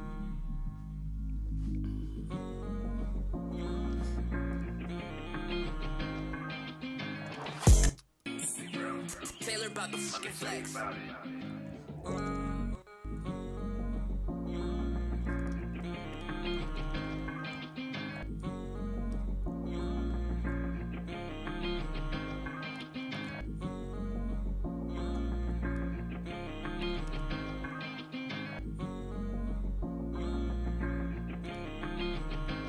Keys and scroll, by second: 9.0 typing, 10.4 typing, 15.5 b, 16.5-17.1 typing, 22.9 b, 27.0 super+s.